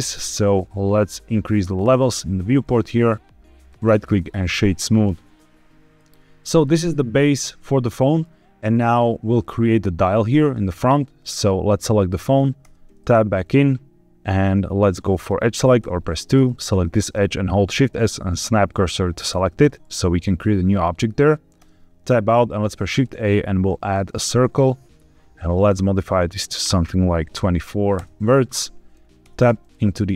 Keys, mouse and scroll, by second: 1.7 click, 2.7-3.3 middle drag, 3.6 right click, 5.0 z, 5.9 z, 6.5-8.1 middle drag, 10.4 middle click, 11.2 click, 12.5 Tab, 15.1 click, 15.7 2, 16.3 click, 17.6 shift+s, 21.5 Tab, 22.4 shift+a, 25.6 click, 26.4-27.9 drag, 29.2 Tab.